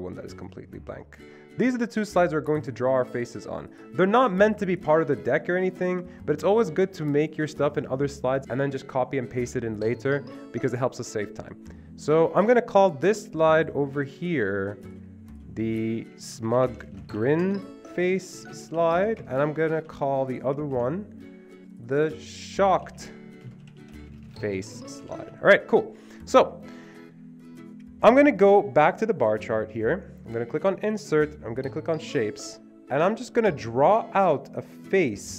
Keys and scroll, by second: 16.1-19.5 typing, 19.8 ctrl+c, 20.8 ctrl+v, 22.6-26.2 typing.